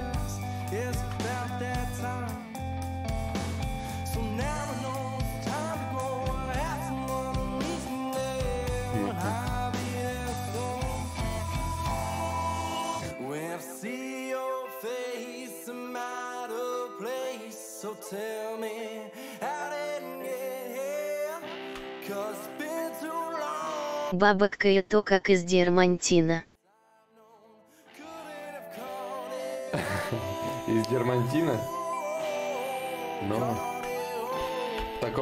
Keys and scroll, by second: 5.5 ctrl+z, 6.3 ctrl+z, 6.5 ctrl+z, 7.3 ctrl+z, 7.9 ctrl+z.